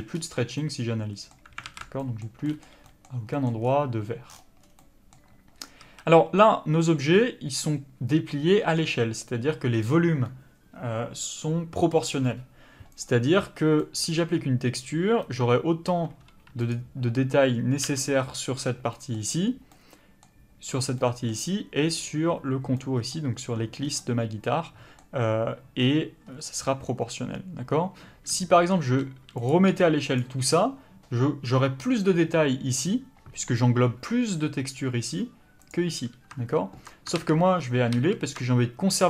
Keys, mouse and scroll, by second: 1.6 alt+a, 5.8 a, 13.0 click, 17.9 l, 18.9 middle click, 23.8 scroll down 1, 24.0 middle click, 26.3-27.9 scroll up 1, 28.8 s, 29.5 click, 29.7 g, 35.7 click, 37.2 ctrl+z.